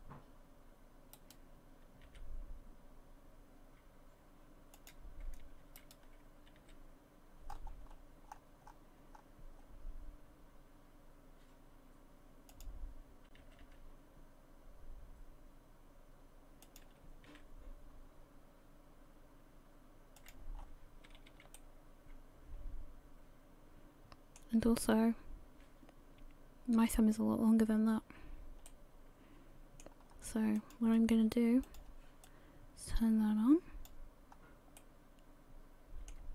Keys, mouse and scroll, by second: 1.2 right click, 2.1 g, 5.8 alt+right click, 6.6 s, 13.4 g, 17.3 s, 20.5-21.1 scroll down 5, 21.1 a, 21.3 a, 21.5 middle click, 27.0-28.0 scroll up 3, 28.7 middle click, 30.1 scroll up 1, 30.6 click, 31.6 click, 32.2 click, 34.3-34.8 scroll up 1, 34.8 middle click.